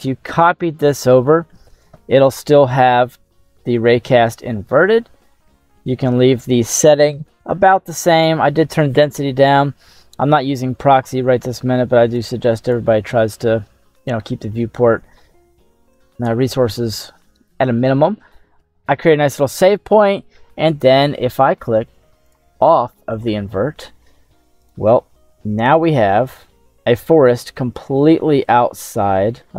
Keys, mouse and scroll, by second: 2.8 middle click, 4.9 middle click, 12.1 click, 13.6 middle click, 13.6-14.2 scroll down 1, 14.4 scroll up 1, 16.0 ctrl+s, 22.4 click, 24.6 right click, 25.1-28.7 ctrl+middle drag.